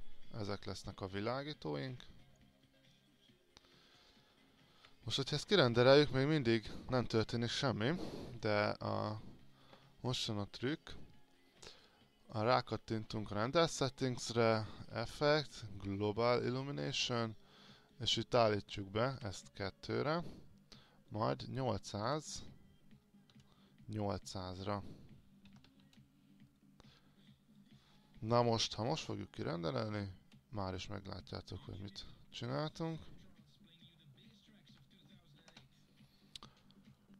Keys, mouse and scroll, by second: 5.6 ctrl+r, 12.4-17.2 drag, 19.4 KP_2, 20.3 click, 22.1 KP_8, 23.5 KP_0, 24.8 click, 25.7 KP_8, 32.1 alt+click, 33.4-34.2 scroll up 1, 34.5 alt+click, 35.5 ctrl+r.